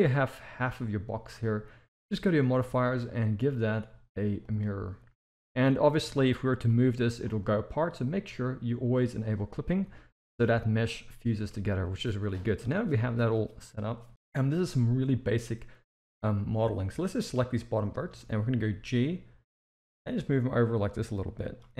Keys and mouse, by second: 2.3 click, 2.9-4.5 drag, 5.6 middle click, 6.0 a, 6.6 g, 8.8 click, 9.8 g, 11.4 KP_1, 16.4 click, 17.8 shift+middle drag, 18.6 g.